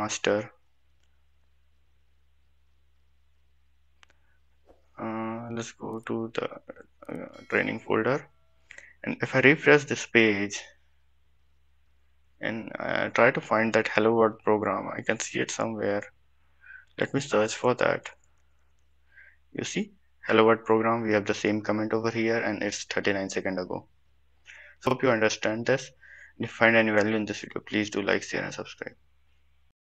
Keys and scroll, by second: 17.3 ctrl+f.